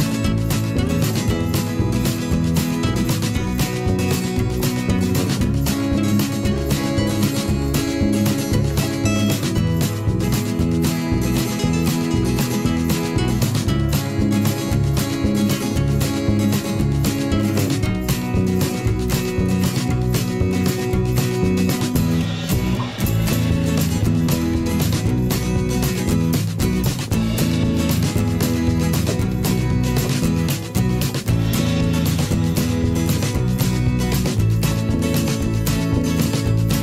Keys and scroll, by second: 0.4 ctrl+], 0.8 ctrl+[, 1.1 ctrl+], 1.2 ctrl+[, 1.4 ctrl+], 5.5 ctrl+], 7.3 ctrl+shift+[, 7.8 ctrl+shift+], 8.1 ctrl+shift+[, 8.3 ctrl+shift+], 8.8 ctrl+[, 9.2 ctrl+], 9.9 ctrl+[, 11.4 ctrl+[, 11.7 ctrl+], 13.0 ctrl+[, 15.2 ctrl+shift+], 15.9 ctrl+[, 16.9 ctrl+], 18.9 ctrl+z, 22.1 ctrl+shift+[, 22.7 ctrl+shift+[, 25.9 ctrl+[, 27.0 ctrl+shift+[, 27.1 ctrl+], 28.1 ctrl+shift+[, 31.1 ctrl+shift+], 32.5 ctrl+], 33.7 ctrl+[, 34.6 Delete.